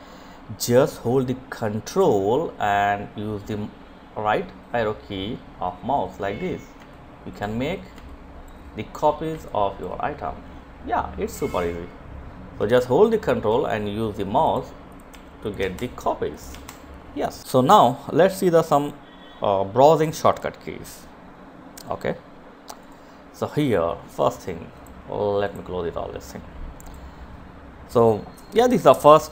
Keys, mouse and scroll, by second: 3.8 ctrl+click, 5.2 ctrl+click, 6.2 ctrl+click, 7.7 ctrl+click, 10.8 Delete, 11.7 Delete, 12.7 click, 13.4 Delete, 13.6 click, 13.8 Delete, 14.5 click, 14.7 Delete, 21.1-24.6 drag.